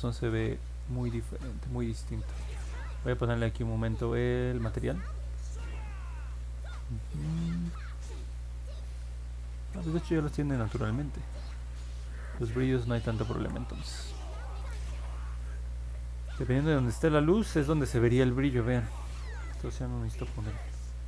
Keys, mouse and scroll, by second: 0.2 ctrl+z, 2.0 ctrl+z, 10.3 click, 11.3 ctrl+z, 12.5 ctrl+z, 12.9 ctrl+z, 16.8-21.0 alt+drag.